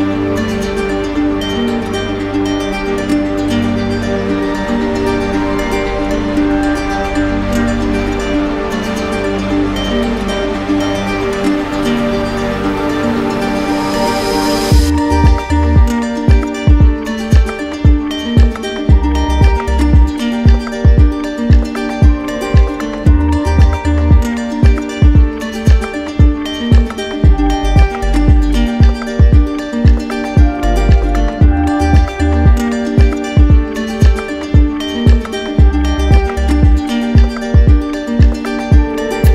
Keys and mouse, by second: 2.7 ctrl+click, 4.8 click, 9.4 click, 10.4 click, 12.2 ctrl+click, 13.8 d, 18.7 ctrl+click, 20.0 ctrl+click, 20.5 ctrl+click, 20.8 ctrl+z, 21.7 ctrl+z, 24.3 ctrl+click, 26.8 ctrl+click, 28.1 ctrl+click, 30.9 click, 32.8 click, 33.3 shift+click, 34.6 click, 35.2 click, 36.0 click, 37.3 0, 37.7 Return.